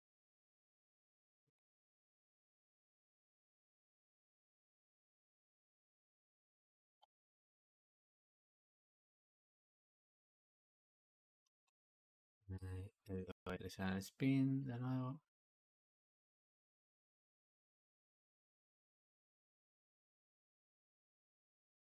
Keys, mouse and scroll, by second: 0.9 Escape, 3.9-5.0 drag, 5.0-6.9 shift+middle drag, 6.9 space, 11.4 Escape, 14.4-15.5 drag, 16.0 click, 18.6-21.9 drag.